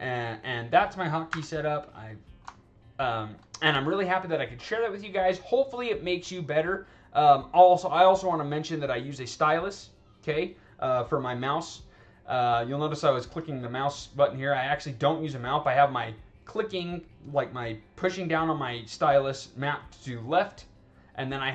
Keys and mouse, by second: 0.0 click, 1.2 w, 1.8 click, 3.0 alt+click, 13.3 click, 13.7 click, 13.9 click, 14.0 click, 14.4 right click, 14.8 right click, 15.1 right click, 18.3 click, 20.2 click.